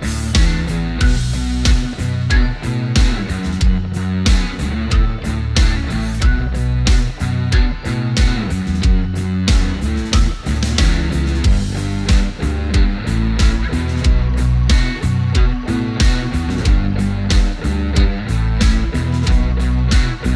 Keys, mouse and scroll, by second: 2.4-18.0 drag, 18.0 right click, 18.9 click, 19.4-19.7 scroll down 1.